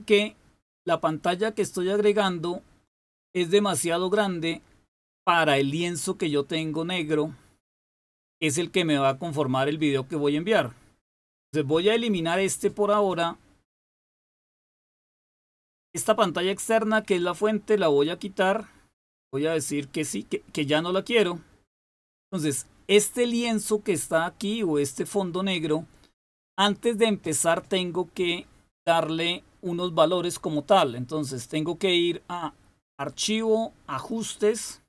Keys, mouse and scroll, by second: 17.9 click, 20.7 click, 31.2 click, 34.1 click.